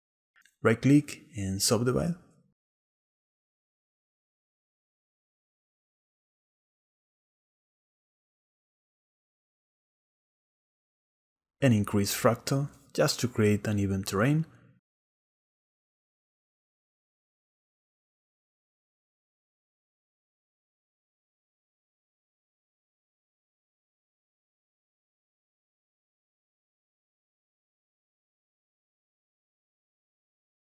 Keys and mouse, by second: 6.5 click, 12.2-15.5 shift+middle drag, 15.9 middle click, 20.7 Tab, 21.3 click, 22.5 click, 24.7 click, 25.8 middle click, 27.1-27.7 shift+middle drag, 29.0 click, 29.6 right click.